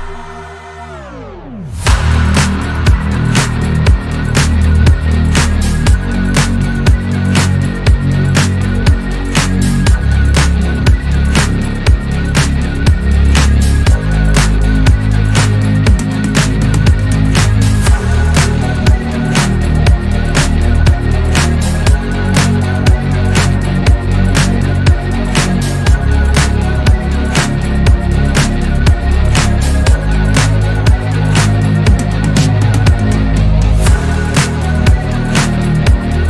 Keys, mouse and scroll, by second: 0.2-0.9 middle drag, 0.9 KP_7, 1.6 scroll up 1, 1.7-2.7 shift+middle drag, 2.7 scroll up 2, 3.0 Tab, 4.3 alt+click, 5.2 ctrl+b, 8.2 Tab, 8.5 scroll down 1, 9.3 scroll up 1, 9.7 Tab, 10.5 alt+click, 11.4 ctrl+b, 12.7 Tab, 12.9 scroll down 1, 13.3 shift+middle click, 13.7-14.0 scroll up 1, 14.9 Tab, 15.7 alt+click, 19.2 ctrl+b, 20.6 Tab, 20.8-21.2 scroll down 2, 21.2-21.8 shift+middle drag, 21.8 scroll up 1, 22.2 Tab, 23.2 s, 25.3 click, 26.1 s, 28.9 alt+click, 29.7-31.6 middle drag, 31.8 KP_7, 32.2 1, 32.7 click, 33.4 shift+middle click, 34.0 click, 34.8 s.